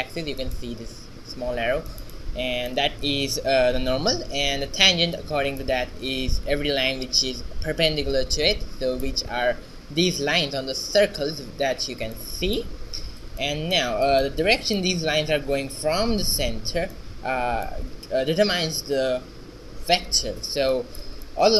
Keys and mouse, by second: 0.4 middle click, 7.0-8.3 middle drag, 13.4 shift+z.